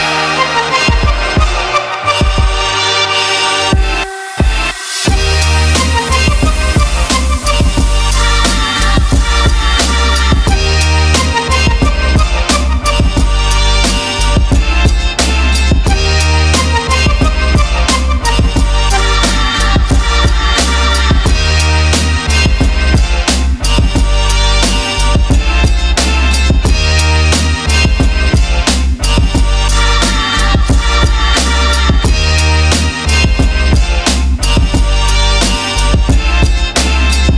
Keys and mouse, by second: 1.1 click, 2.1-3.6 drag, 4.1 click, 6.9 click, 9.7 click, 10.2 click, 11.2 click, 11.9 click, 13.3 click, 14.2 click, 14.6 click, 16.2 shift+middle click, 17.4 shift+click, 18.7 click, 20.2 click, 20.7 click, 22.1 click, 23.2 click, 24.5 middle click, 25.1 middle drag, 26.9 shift+drag, 27.9 shift+click, 28.6 shift+click, 28.9 shift+click, 30.2 click, 31.5 click, 32.2 shift+click, 33.8 ctrl+z, 35.1 click, 35.8 click, 37.2 ctrl+middle click.